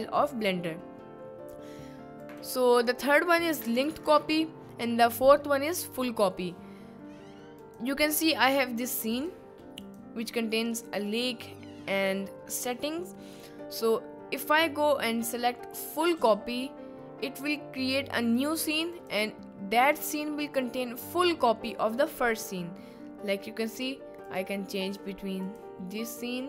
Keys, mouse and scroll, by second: 2.2-6.7 drag, 7.6 click, 9.2 click, 14.3-16.2 drag, 18.9 click, 23.7 click, 24.9 click, 26.0 click.